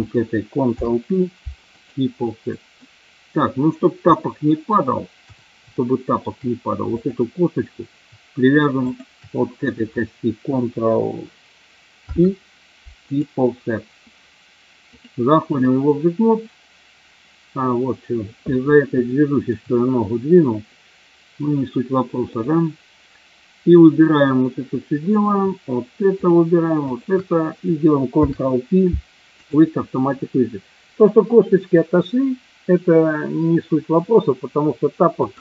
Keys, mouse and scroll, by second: 0.7 ctrl+p, 2.8 middle click, 4.2 middle click, 5.7 shift+middle click, 6.9 click, 8.8 shift+click, 12.0 ctrl+p, 15.0-15.6 drag, 19.0-19.5 shift+middle drag, 22.3 click, 26.0 shift+click, 26.8 shift+click, 28.2 ctrl+p.